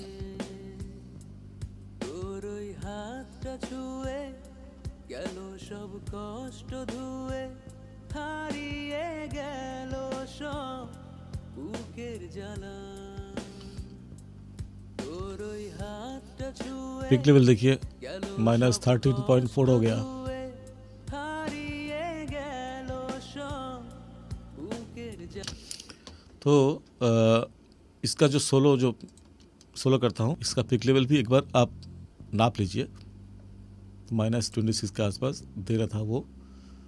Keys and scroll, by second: 25.3 space.